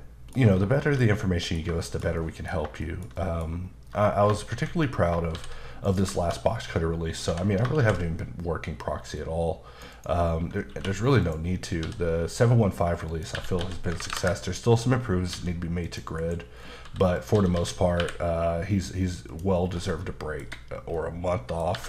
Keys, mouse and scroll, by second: 0.0 middle click, 0.8 shift+middle click, 1.8 shift+middle click, 2.8 middle click, 3.6-4.3 scroll up 3, 4.5 ctrl+z, 5.3 shift+s, 5.8 click, 7.3 h, 7.8 shift+a, 9.2 click, 9.9 double click, 10.7 q, 11.2 click, 11.9 s, 13.1 click, 13.3-13.9 typing, 14.1 KP_Enter, 15.4-18.0 typing, 15.9 click, 16.6 scroll down 3, 17.2 click, 19.3 click, 19.7 scroll down 2, 19.9 middle click, 20.9 middle click, 21.7 typing.